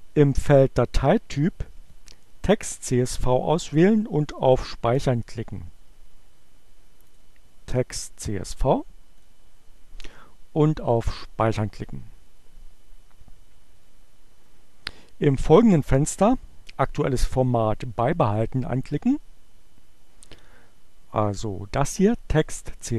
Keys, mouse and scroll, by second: 7.2 click, 9.2 click, 11.3 click.